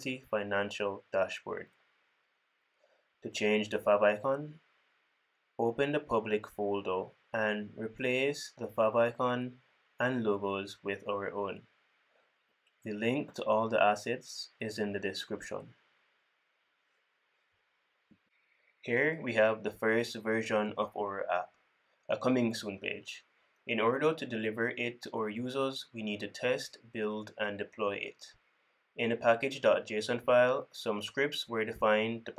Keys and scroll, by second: 2.1 super+s, 2.6 super+s, 6.7 super+w, 7.5 super+b, 10.5 ctrl+super+f, 10.7 ctrl+super+f, 30.1 super+p.